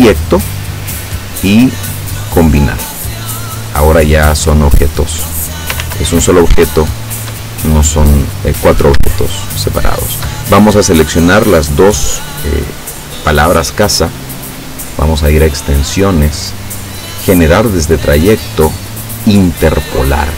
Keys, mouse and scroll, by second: 2.9 click, 4.6 click, 5.2 click, 5.9 ctrl+z, 6.7 ctrl+shift+click, 7.6 shift+click, 8.1 shift+click, 9.2 shift+click, 14.4 click, 19.2 click.